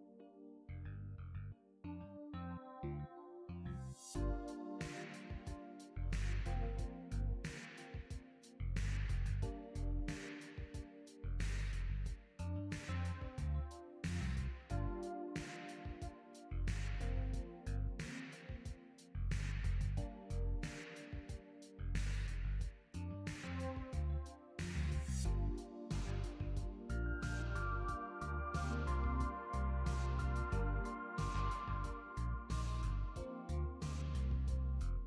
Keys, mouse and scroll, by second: 0.3 click, 3.1 click, 4.0 click, 7.1 click, 7.6 click, 11.2 click, 17.7 click, 19.8 click, 20.6 click, 21.4 click, 24.3 click, 24.6 ctrl+a, 27.3 click, 28.0 middle click.